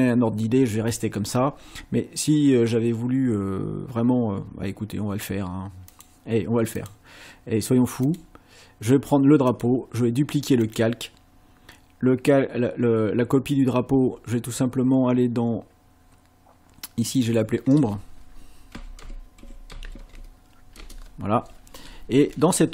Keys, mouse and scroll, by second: 5.9 click, 6.8 click, 8.1 click, 9.5 click, 10.6 click, 17.1 click, 18.5-20.4 typing, 20.8 Return.